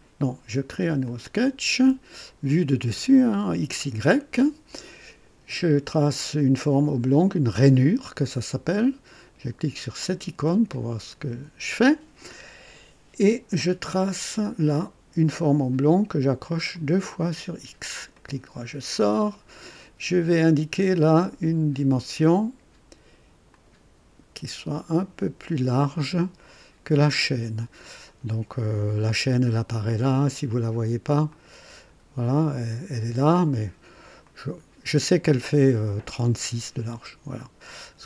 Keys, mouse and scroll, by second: 1.0 click, 3.3 click, 7.4 click, 8.5 right click, 10.0 click, 10.7 right click, 14.3 click, 16.7 click, 18.1 right click, 18.8 scroll up 1, 23.5 click, 25.2 click, 31.3 click, 34.2 click.